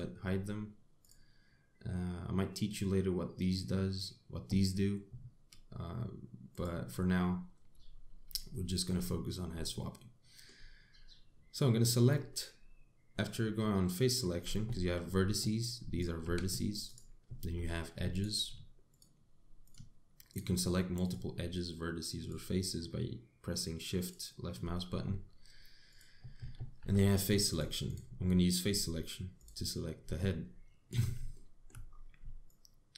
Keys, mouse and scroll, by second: 8.6 scroll up 1, 9.1 shift+middle click, 10.4 shift+middle click, 15.4 1, 15.8-16.1 scroll up 2, 16.3 click, 16.9 g, 18.2 2, 18.8 click, 19.6 shift+click, 20.3 click, 20.9 click, 21.7 click, 22.9 shift+click, 24.6 shift+click, 26.5 click, 27.4 3, 28.1 click, 28.5 click, 28.9 scroll down 2, 30.0 click, 30.8 shift+click, 32.0 shift+middle click, 32.5 scroll up 4.